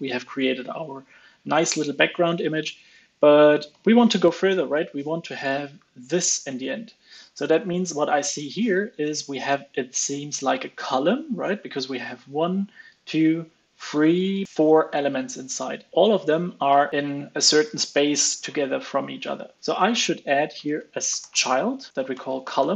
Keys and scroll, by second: 3.6 super+Right.